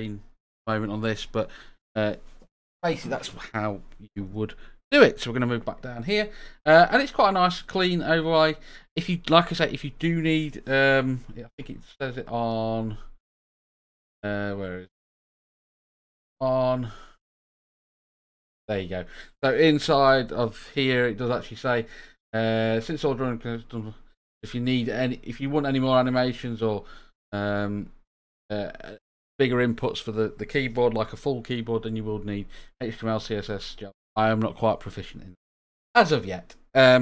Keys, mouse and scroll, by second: 6.6 click, 11.9 click.